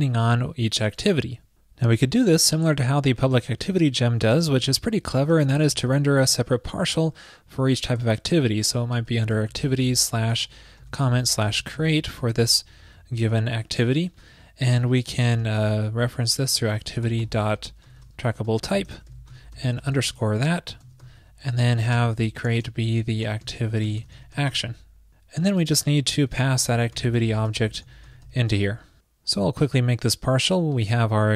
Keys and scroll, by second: 4.5 ctrl+shift+>, 12.4 alt+Left, 12.9 alt+shift+Right, 21.7 alt+shift+Right.